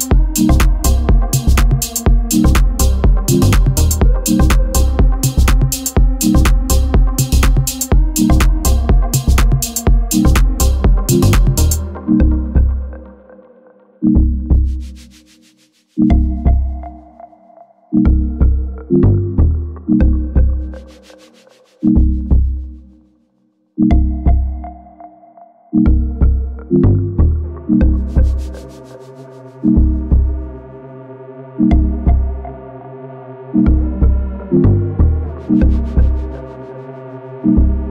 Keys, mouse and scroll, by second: 0.0-1.1 shift+middle drag, 1.1-1.8 scroll down 2, 1.8-2.2 shift+middle drag, 2.2-4.2 scroll up 3, 4.2 shift+d, 6.3 g, 6.6 r, 7.2 g, 7.8 g, 9.1-9.6 scroll down 4, 9.6-9.9 shift+middle drag, 9.9-10.3 scroll down 1, 10.3-10.9 scroll up 4, 10.9-11.3 shift+middle drag, 11.3-11.7 scroll up 1, 11.7-12.0 scroll down 3, 12.0 b, 13.1 ctrl+i, 13.3 scroll up 4, 13.5 Tab, 14.1 click, 14.4 b, 14.9 g, 16.6-17.1 scroll down 5, 16.8 z, 17.4-17.9 middle drag, 17.9 click, 18.2 scroll down 1, 18.4-20.3 shift+middle drag, 20.3-20.7 scroll up 4, 20.7 alt+middle click, 21.5 alt+middle drag, 21.9 click, 22.8-25.0 drag, 26.7 click, 27.0 click, 28.4 click, 28.6 click, 29.0-29.5 shift+middle drag, 29.5-30.3 scroll up 6, 29.9 Tab, 30.3 shift+middle click, 30.7-33.2 typing, 30.9 click, 34.4 g, 35.6 click, 36.3 g.